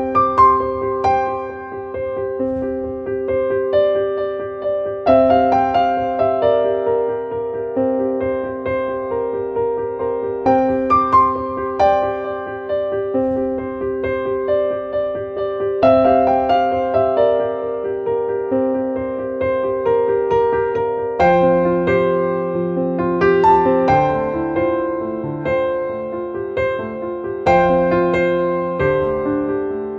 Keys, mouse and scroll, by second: 3.1-4.9 drag, 4.9 click, 5.8 scroll up 1, 6.6 click, 7.5-9.2 drag, 9.2-11.3 drag, 11.3 click, 13.2 click, 14.0 click, 15.0-16.6 drag, 17.8 click, 18.6 click, 20.3 click, 21.6 click, 27.0 click, 29.0 click.